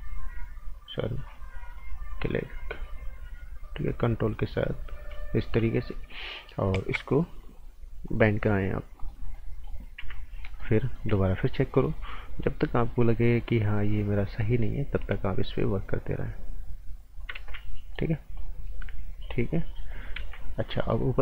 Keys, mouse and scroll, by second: 1.2 ctrl+click, 1.7 ctrl+click, 8.0 click, 9.3 right click, 10.0 z, 10.2 scroll down 1, 10.4 right click, 11.1 z, 11.7 click, 17.4 ctrl+z, 17.7 right click, 18.3 click, 20.2 ctrl+z, 20.5-21.1 scroll up 2, 20.7 right click.